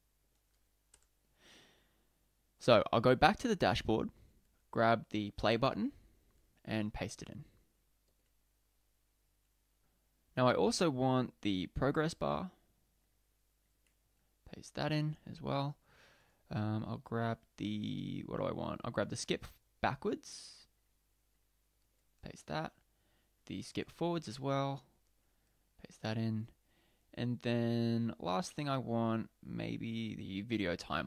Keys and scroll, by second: 8.1 super+v, 13.7 super+v, 21.8 super+v, 25.1 super+v.